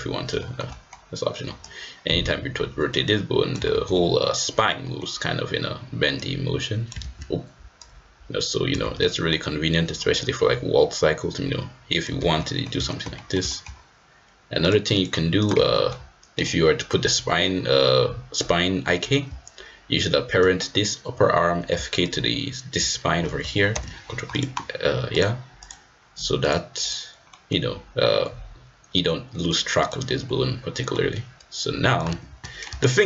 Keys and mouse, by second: 0.4 shift+click, 0.7 click, 0.8 middle click, 1.6-3.6 drag, 3.8 ctrl+z, 4.8 middle click, 6.2 click, 7.1 ctrl+z, 7.8-8.9 drag, 8.9 ctrl+z, 9.0 middle click, 10.1-12.1 drag, 12.3 ctrl+z, 12.4 middle drag, 12.8 shift+middle click, 13.1 middle drag, 13.4 shift+middle drag, 15.0-15.5 drag, 15.7 shift+middle click, 23.7 ctrl+p, 25.1-25.8 drag, 26.5 click, 27.2 middle drag, 29.3 click, 29.7-30.9 drag, 30.9 middle drag, 31.1 middle drag, 31.4 click, 32.2 ctrl+z, 32.4 ctrl+z, 32.4 middle drag, 32.8 shift+middle click.